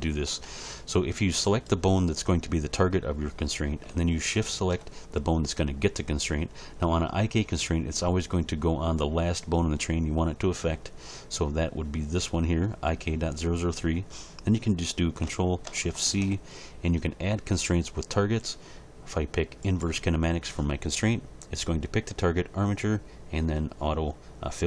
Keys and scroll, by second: 16.0 ctrl+shift+c.